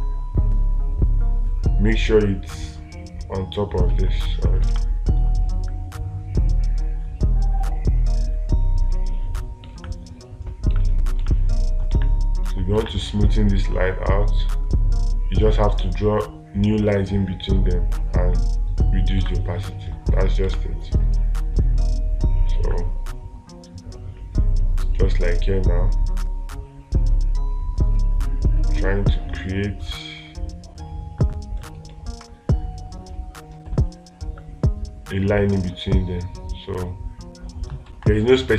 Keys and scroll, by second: 4.3 ctrl+z, 5.1 space, 10.2 space, 11.6 space, 13.3 space, 17.3 space, 19.6 space, 32.3 space, 38.3 space.